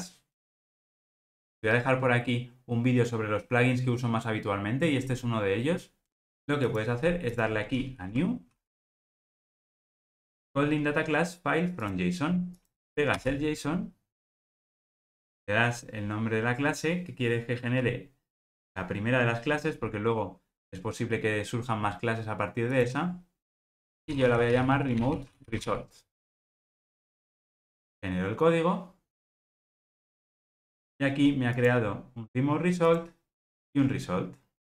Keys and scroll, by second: 8.2 super+n, 11.8 super+n.